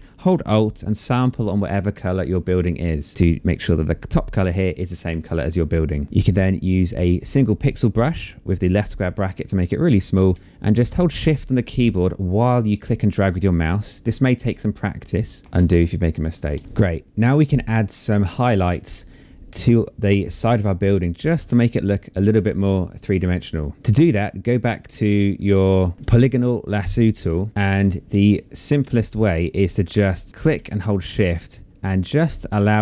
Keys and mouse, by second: 0.0 alt+click, 8.8 click, 14.6 click, 15.4 ctrl+z, 23.7 click, 26.2 click, 29.8 click, 32.5 shift+click.